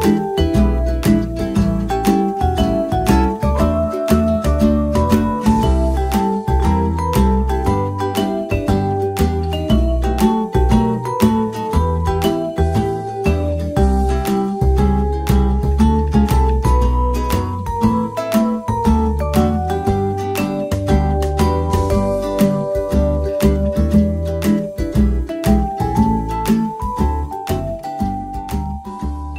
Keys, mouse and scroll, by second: 1.5-3.4 drag, 4.5-6.4 drag, 6.4-7.9 middle drag, 7.9-8.8 right drag, 8.8 Tab, 9.4 right click, 10.8 right click, 12.1 right click, 13.6-15.5 drag, 16.7 r, 17.9 click, 18.1 r, 19.1 click, 19.5 middle click, 19.8 g, 20.7 click, 20.7 right click, 22.0 r, 22.1-23.5 drag, 22.1 g, 23.5 middle click, 23.8 r, 23.9 click, 25.1 middle click, 25.8 middle click, 27.0 middle click, 27.9 click, 28.2 middle drag, 28.3 Tab, 29.1 click, 29.1 a.